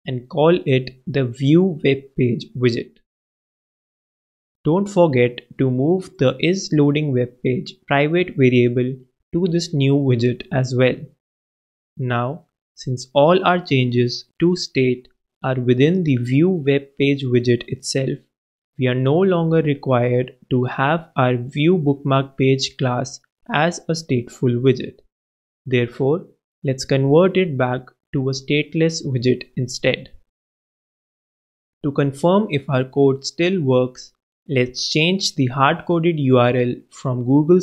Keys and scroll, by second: 0.0-4.4 typing, 6.3 shift+super+v, 6.8 super+v, 7.9 shift+super+Right, 8.0 shift+super+x, 8.2 super+BackSpace, 9.3 super+Return, 9.5 super+Up, 18.4 alt+Return, 26.8 super+c, 27.8 super+v, 29.3 super+BackSpace, 33.0 shift+Right, 33.2 shift+s, 33.5 shift+t.